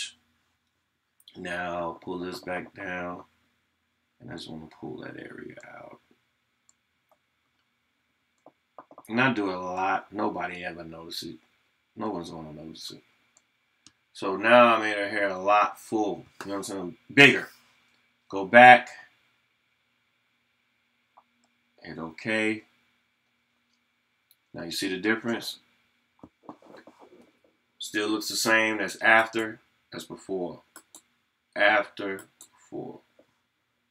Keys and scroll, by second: 1.8 [.